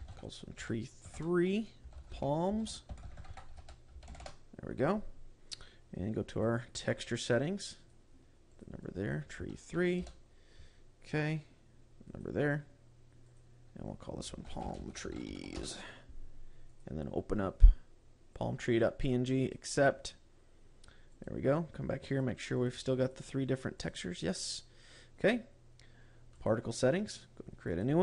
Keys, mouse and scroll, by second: 6.8 click, 8.2 click, 9.0 click, 11.4 scroll down 4, 12.6 click, 13.8 click, 17.2 click, 20.1 click, 21.8 click, 22.6 click, 23.0 click, 23.5 click, 24.2 click, 24.9 click, 26.9 click.